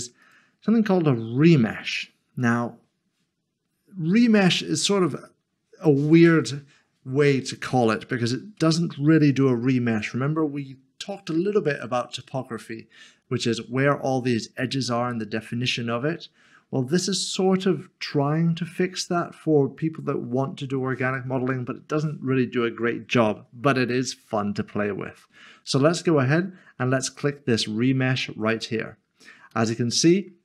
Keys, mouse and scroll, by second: 0.2 click, 13.5 click, 14.7 Tab, 16.1 Tab, 21.3 Tab, 28.5 click, 29.5 click, 29.7 middle click.